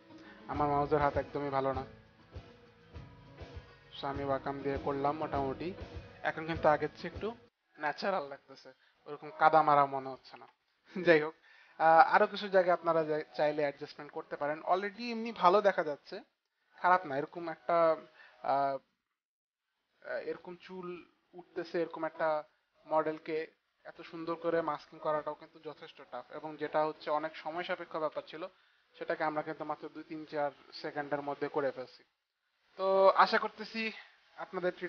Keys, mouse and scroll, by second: 2.7 click, 4.1 click, 4.3 click, 4.5 click, 5.0 click, 8.5 click, 8.8 click, 20.0 click, 23.4 click, 28.2 space, 28.6 click.